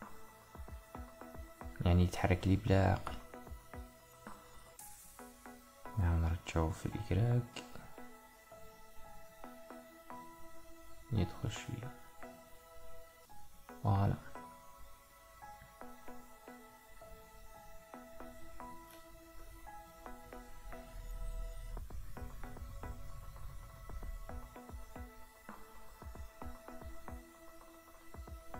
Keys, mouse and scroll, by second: 4.2-6.1 middle drag, 6.1 g, 12.6-14.6 middle drag, 14.8-19.5 ctrl+middle drag, 21.2 g, 23.9-26.4 middle drag, 26.4 KP_1.